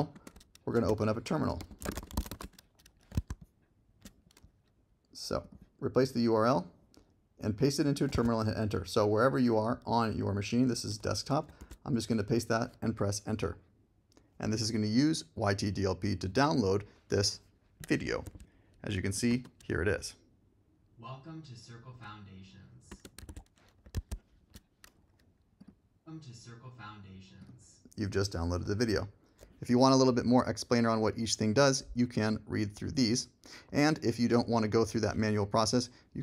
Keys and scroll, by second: 0.1 super+space, 0.8-2.8 typing, 1.0 Return, 3.1 super+Tab, 8.2 super+Tab, 11.6 super+v, 12.3 Return, 19.3 space, 22.9 space, 23.9 super+Tab.